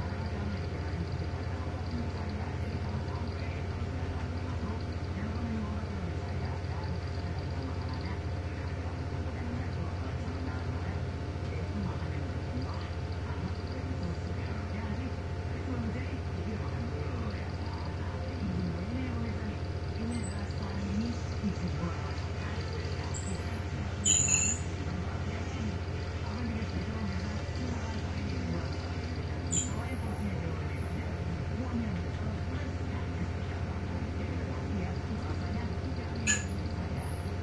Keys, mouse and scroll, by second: 2.8 Delete, 4.1 ctrl+z, 7.3 Delete, 10.2-11.9 drag, 13.3 click, 17.2 click, 18.2 click, 19.8 click, 21.5 click, 23.4 click, 25.7 click, 26.5 click, 29.6-31.4 drag, 32.1 Right, 34.7 click, 36.8 click.